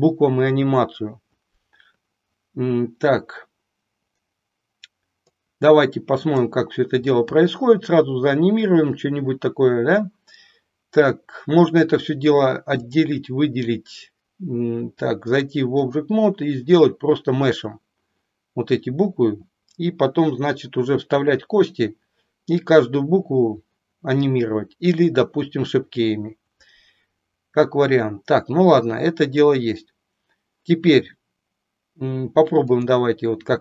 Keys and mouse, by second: 5.4-6.4 drag, 12.8-14.8 drag, 15.2 click, 32.7 click.